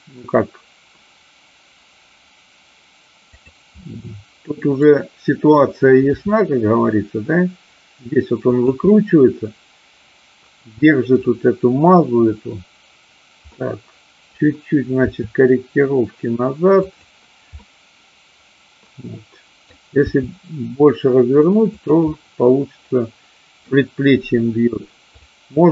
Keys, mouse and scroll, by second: 3.4 click, 3.8-4.8 scroll up 1, 6.1 r, 8.6 click, 8.8-11.1 middle drag, 13.5-14.2 middle drag, 15.0 r, 16.8 click, 17.5-19.7 middle drag, 20.1 r, 21.7 click, 22.1-23.6 middle drag, 25.1-25.7 drag.